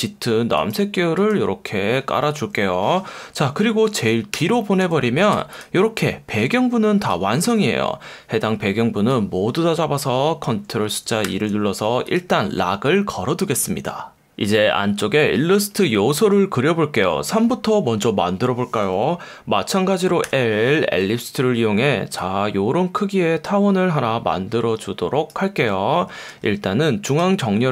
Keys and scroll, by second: 4.3 shift+super+[, 5.3 v, 11.2 super+2, 20.3 l, 26.3 F1.